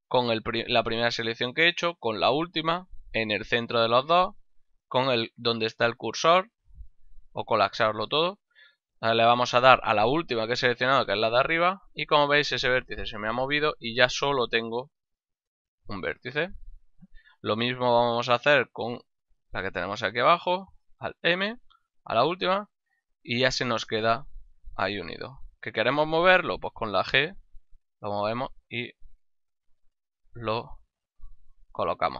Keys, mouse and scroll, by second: 11.5 click, 13.6 right click, 14.3 g, 15.2 right click, 15.6 middle click, 16.2 g, 16.8 right click, 17.9 right click, 18.5 shift+right click, 20.6 alt+m, 21.8 click, 22.5 middle click, 25.3 right click, 25.8 middle click, 26.8 g, 27.8 click, 28.0 middle click, 29.3 g, 30.1 click, 30.7 g, 31.2 click, 31.6 ctrl+middle click.